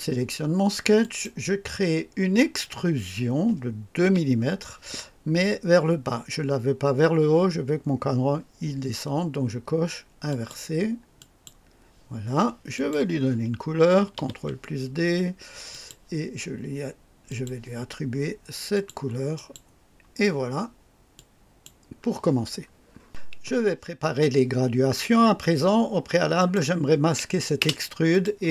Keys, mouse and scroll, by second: 1.0 click, 4.0 KP_2, 10.3 click, 11.2 click, 12.7 click, 14.2 ctrl+d, 15.7 click, 17.3 click, 18.7 click, 19.3 click, 21.2 click, 26.3 click, 27.6 space, 28.1 click.